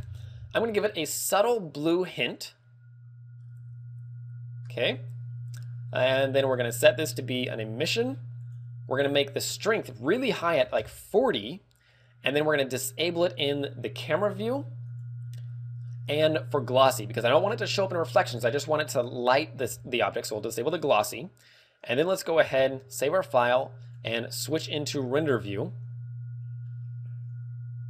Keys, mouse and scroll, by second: 1.3 click, 2.7 click, 6.5 click, 8.3 click, 9.7 ctrl+click, 11.6 ctrl+click, 12.3 click, 13.9 click, 16.5 click, 21.3 click, 22.6 ctrl+w, 23.9 click.